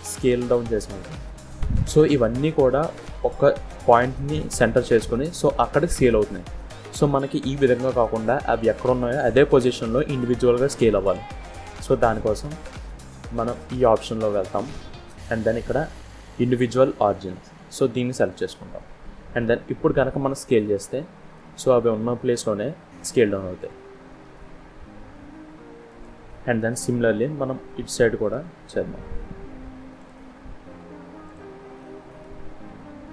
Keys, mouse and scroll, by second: 14.1 click, 20.1 s, 26.3-26.7 scroll down 3, 26.7 middle click, 28.8-29.4 scroll up 2, 29.8 click, 31.1 shift+click, 31.7 middle click, 33.0 shift+click.